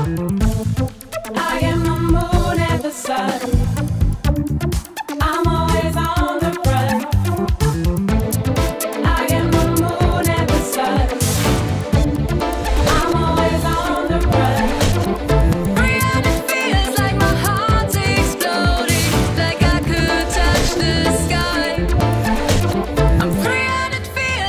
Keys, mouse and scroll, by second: 0.0-1.2 typing, 3.1-3.5 typing, 3.2 click, 3.9 shift+click, 4.5 shift+click, 6.0 shift+click, 10.8 click, 11.0 click, 13.9 click, 14.6 click, 15.0 click, 15.9 click, 16.4 drag, 22.0 click, 23.4-24.0 drag.